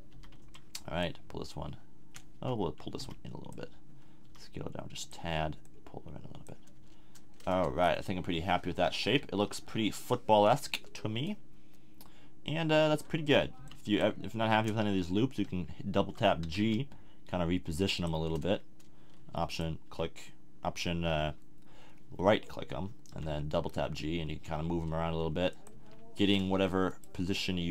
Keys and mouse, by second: 0.1 n, 0.4 b, 2.3 a, 3.0 b, 4.2 s, 5.1 click, 6.8 a, 7.5 Tab, 9.1 KP_1, 10.7 Tab, 13.6 b, 16.4 g, 18.0-19.5 drag, 19.5 middle click, 23.1 g, 25.6 click, 25.7 a.